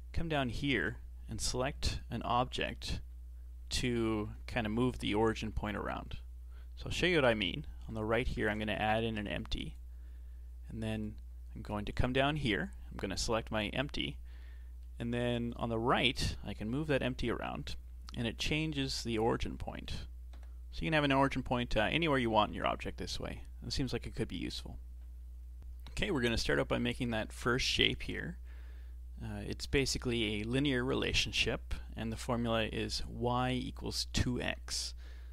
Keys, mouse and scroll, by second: 8.3 shift+a, 10.9-12.5 right drag, 12.5-14.3 drag, 14.3-15.5 middle drag, 15.5-15.9 right drag, 15.9-16.9 middle drag, 16.9 g, 19.7 middle click, 20.3 KP_7, 20.8 g.